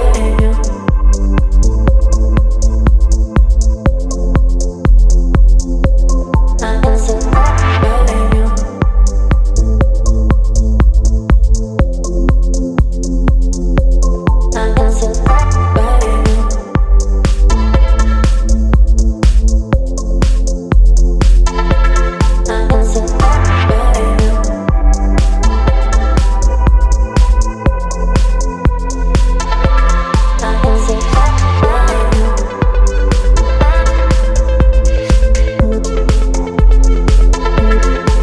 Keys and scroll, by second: 5.0 ctrl+BackSpace, 29.8 Left, 29.9 Left, 33.1 Left, 37.3 z.